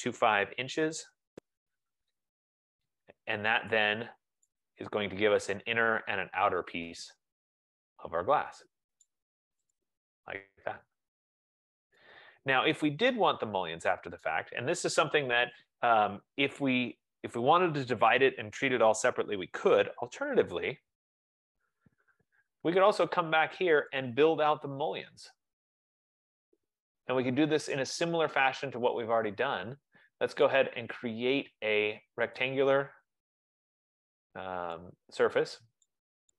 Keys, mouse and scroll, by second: 0.0-0.7 typing, 1.9 ", 2.1 Return, 3.8 click, 9.2 right click, 10.1 click, 14.5 right click, 21.0-22.1 typing, 23.9 typing, 24.1 click, 25.2 click, 30.7 right click, 32.5 click.